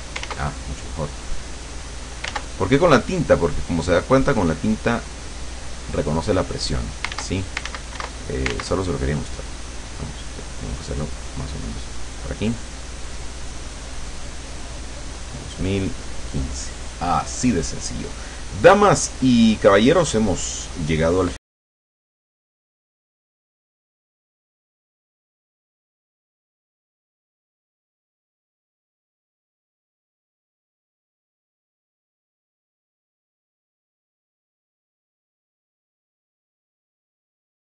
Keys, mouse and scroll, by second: 0.3 ctrl+z, 1.2 click, 2.3 ctrl+z, 3.1 click, 4.4 click, 5.2 click, 5.8 click, 7.2 ctrl+z, 10.2 click, 11.2 click, 11.9 click, 12.6 click, 13.1 click, 13.6-14.7 drag, 14.9 click, 16.2 click, 22.9 KP_Subtract, 32.2 click, 36.6-37.7 drag.